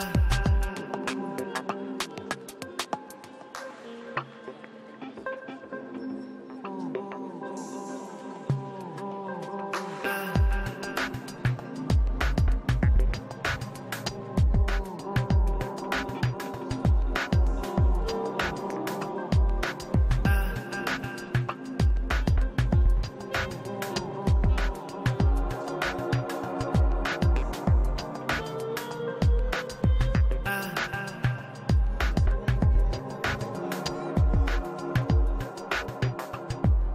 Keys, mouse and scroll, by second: 0.6 middle click, 0.9-6.4 drag, 3.0 middle click, 4.1 middle click, 4.9 middle click, 5.8 middle click, 6.4 middle click, 7.3-10.4 drag, 10.4 middle click, 11.0-18.4 drag, 11.7 i, 11.9 f, 12.5 shift+f, 14.0-17.0 middle drag, 18.4 middle click, 18.4 shift+c, 18.5 f, 18.7 f, 18.9-27.5 drag, 21.2 i, 21.4 f, 22.9 f, 24.1 middle click, 25.0 middle click, 27.5 middle click, 27.6 shift+c, 27.8 f, 28.1-32.3 drag, 29.1 middle click, 29.5 i, 29.6 f, 30.0-31.3 middle drag, 31.8 middle click, 32.7 g, 32.8 f, 33.2 click, 33.6 f, 34.7 i, 34.8 f, 34.9 middle click, 35.0-36.9 drag, 35.4-36.7 middle drag, 36.8-36.9 middle drag.